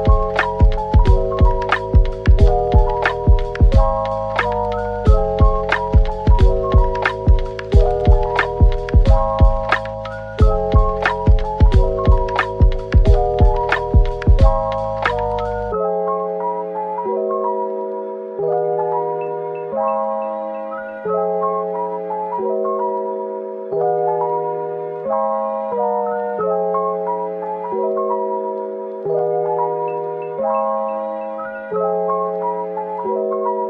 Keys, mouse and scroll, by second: 0.6 typing, 2.0 middle click, 3.8 typing, 4.1-4.4 scroll up 1, 4.5 Tab, 5.2 typing, 5.5 ctrl+r, 5.9-6.7 scroll up 1, 6.7 double click, 7.8-9.3 typing, 10.4 alt+click, 10.8 right click, 13.8 d, 14.2 right click, 14.8 p, 16.0 Tab, 17.3 typing, 18.6 Tab, 19.0-19.8 typing, 20.8 typing, 25.7 double click, 26.2 Tab, 27.2 double click, 28.2 Tab, 28.5 Tab, 29.1 typing, 29.5-30.1 scroll down 1, 30.1 middle click, 31.2 scroll up 1, 31.6 middle click.